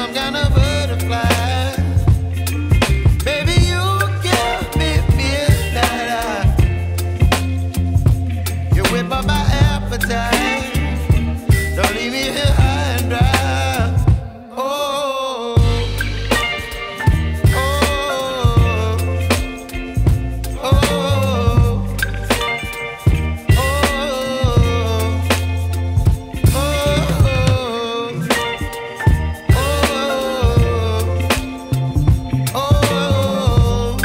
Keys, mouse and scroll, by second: 2.1 click, 2.7-5.6 right drag, 5.6-6.5 scroll up 1, 6.9 ctrl+shift+click, 8.6 ctrl+m, 9.7 click, 10.6 right click, 11.5-11.8 scroll up 1, 12.1 ctrl+shift+click, 13.8 ctrl+m, 14.8 click, 15.4-15.7 scroll down 1, 15.7 right click, 16.3 Tab, 17.0 scroll down 1, 17.1 scroll up 1, 17.3 right click, 18.1 scroll down 1, 18.3 scroll up 1, 18.5-19.8 right drag, 19.8 scroll down 1, 20.0 scroll up 1, 20.3 Tab, 20.6 scroll up 1, 20.9 Tab, 21.5 ctrl+shift+click, 24.2 ctrl+shift+click, 24.9-25.4 scroll down 1, 25.7 ctrl+shift+click, 29.4 scroll down 1, 29.6 right click, 30.5 scroll up 1, 30.8 right click, 31.2 scroll down 1, 31.4-31.9 scroll up 1, 33.3 alt+click.